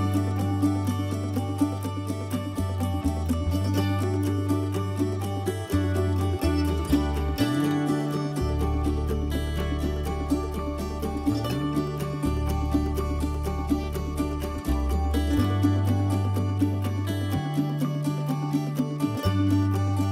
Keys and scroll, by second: 4.3-5.2 typing.